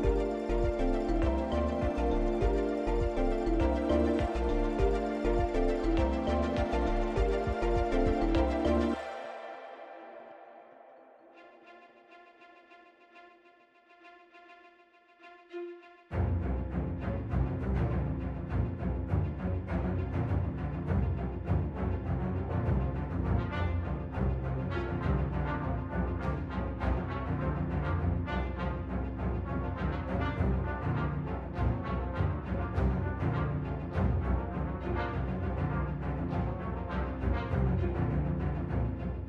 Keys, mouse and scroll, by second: 7.5 click, 8.2 middle click, 11.9-12.3 scroll down 1, 12.6 middle click, 16.4 click, 17.9 click, 18.8 click, 18.9 click, 20.6 o.